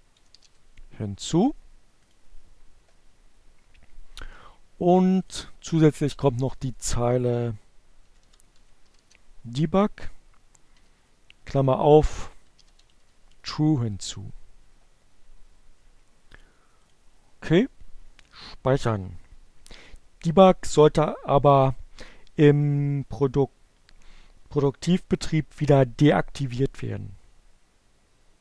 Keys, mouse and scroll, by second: 0.5 click, 4.0 click, 4.2 Return, 6.2-7.5 typing, 8.9-11.2 typing, 14.8 click, 15.1 click.